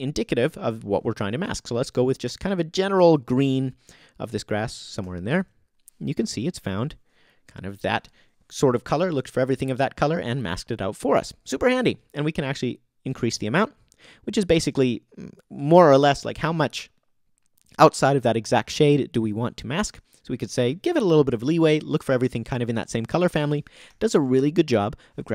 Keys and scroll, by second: 5.0 o, 23.9 o.